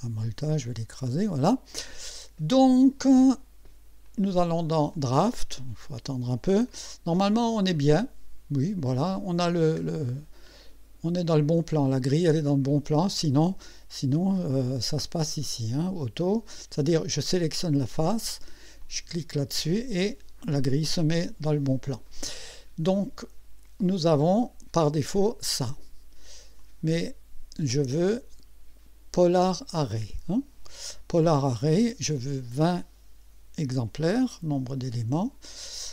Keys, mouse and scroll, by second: 0.6 click, 4.1 click, 4.9 click, 6.7-9.4 drag, 9.5-9.8 scroll down 1, 10.6-11.3 right drag, 11.6-11.9 scroll down 2, 17.4 click, 18.8 click, 24.2 click, 25.1 click, 26.6 click, 27.9 click, 29.6 click, 32.1 click, 34.7 KP_2, 35.2 KP_0.